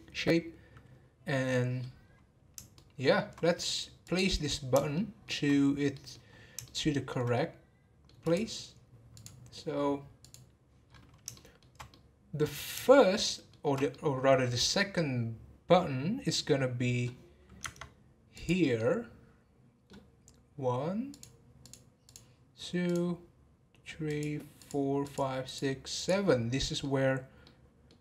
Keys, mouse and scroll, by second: 1.4 scroll up 1, 1.5 middle click, 2.0-2.7 scroll down 3, 2.7-4.0 shift+middle drag, 4.0 click, 4.9-5.5 shift+middle drag, 5.5-6.6 scroll up 3, 5.9-6.3 middle drag, 6.6-8.2 shift+middle drag, 8.2 click, 9.1-10.8 drag, 10.8-11.3 scroll up 5, 11.3-12.5 shift+middle drag, 12.5-12.9 scroll up 3, 12.9-17.0 shift+middle drag, 17.6 Tab, 18.3 click, 18.8-21.1 middle drag, 21.1 click, 21.6 click, 22.1 click, 22.8 click, 24.1 click, 24.6 click, 25.0 click, 25.4 click, 25.9 click, 26.2 middle click, 27.1 scroll up 1, 27.4-28.0 middle drag.